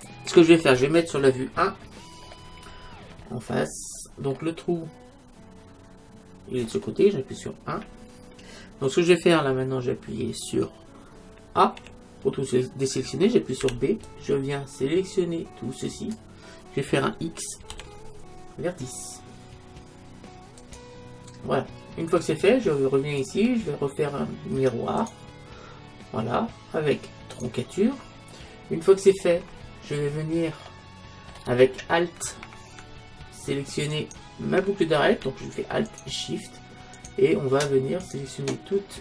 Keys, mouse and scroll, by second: 1.5 KP_1, 2.3 click, 3.2-6.2 middle drag, 7.7 KP_1, 9.5-11.8 middle drag, 11.8 a, 13.7 b, 17.7 x, 23.2-25.1 drag, 27.3-29.2 drag, 29.2-32.4 middle drag, 33.9-35.7 right drag, 35.9-39.0 right drag.